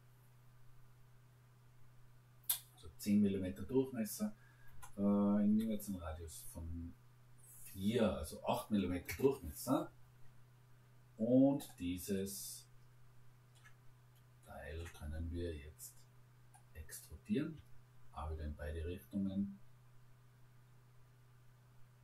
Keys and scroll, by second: 4.7 BackSpace, 5.5 4, 9.1 Return.